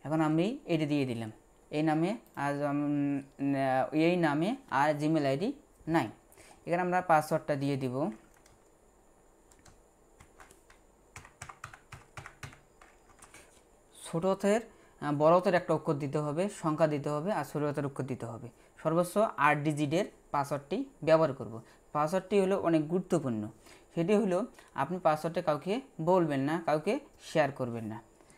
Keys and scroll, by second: 10.2 shift+s, 11.4-13.1 typing.